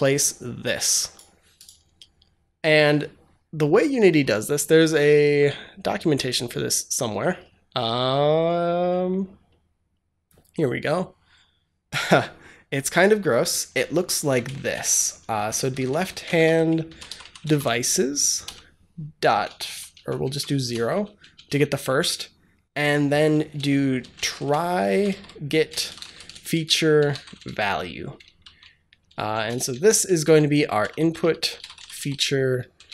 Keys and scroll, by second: 14.1 Up, 14.6 Return, 14.8-17.9 typing, 19.2-21.5 typing, 23.6-28.3 typing, 29.3-32.9 typing.